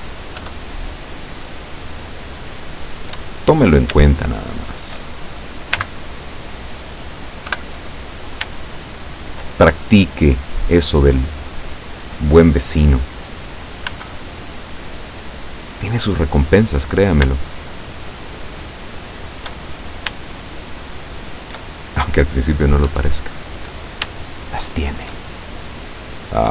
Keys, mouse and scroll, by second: 0.5 KP_7, 2.1 right click, 2.6-3.9 middle drag, 4.5 shift+right click, 5.9 x, 6.3 click, 7.6 KP_7, 8.7-9.7 shift+middle drag, 14.0 b, 14.5-16.0 drag, 17.5 shift+right click, 18.2 shift+right click, 18.6 shift+right click, 19.1 shift+right click, 19.6 shift+middle click, 20.4 shift+right click, 21.2 shift+right click, 21.8 shift+middle click, 22.9 KP_7, 24.4 shift+right click, 25.8-26.5 drag.